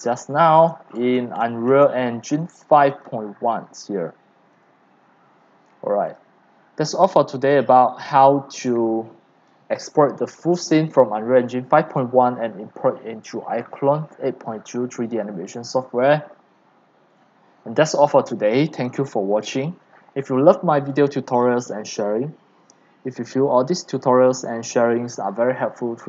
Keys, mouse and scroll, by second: 0.0-0.6 typing, 0.8 shift+click, 0.9-1.8 shift+scroll, 1.5 shift+middle click, 3.0 click, 4.3 click, 7.7 click, 8.1 click, 8.5 click, 12.2 click.